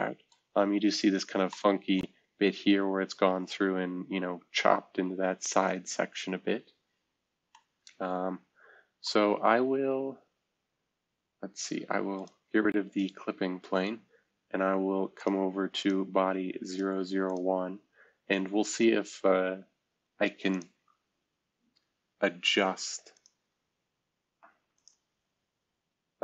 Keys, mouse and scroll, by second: 2.1-2.6 scroll down 2, 2.9-3.6 scroll up 2, 4.6-5.7 scroll down 2, 5.7-7.0 scroll up 2, 12.9-13.7 scroll down 2, 14.0-15.1 scroll up 2, 23.1 click.